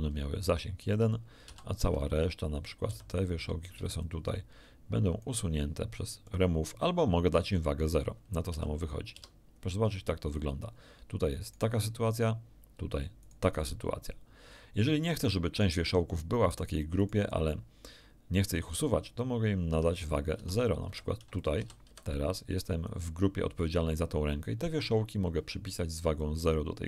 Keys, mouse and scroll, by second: 0.9 click, 1.4 a, 1.7 b, 2.0 click, 2.8 b, 3.0 click, 3.7 b, 4.0-5.4 drag, 6.2 click, 8.4 a, 9.1 Tab, 11.4 click, 13.2 click, 15.5 click, 17.0 click, 19.6 Tab, 20.3 a, 20.8 b, 21.3 click, 21.6 a, 21.8 b, 22.1 click, 26.2 click.